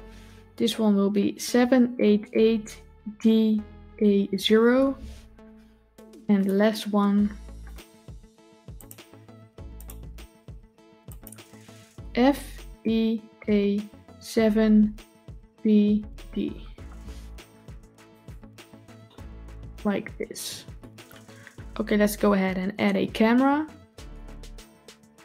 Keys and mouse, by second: 9.6 click, 17.9 click, 18.9-20.6 middle drag, 24.0 n.